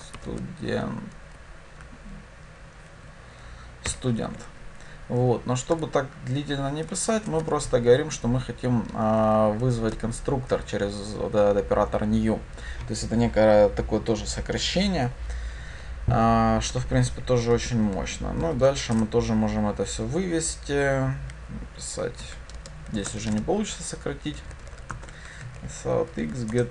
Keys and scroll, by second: 4.2 Escape, 19.0 Return, 25.0 Tab, 26.5 Return.